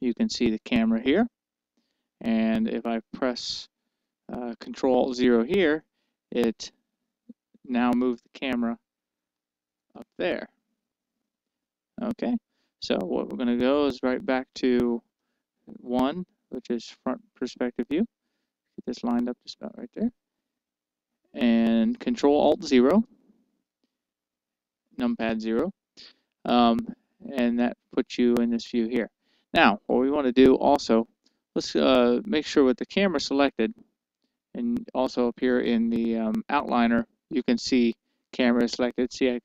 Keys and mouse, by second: 1.3-3.2 right drag, 4.2-6.1 middle drag, 6.1 ctrl+alt+KP_0, 7.9 KP_0, 8.8-12.5 middle drag, 16.1 KP_1, 17.9-21.1 middle drag, 24.1 ctrl+alt+KP_0, 34.5-36.3 drag, 36.8-38.3 drag, 38.6 click.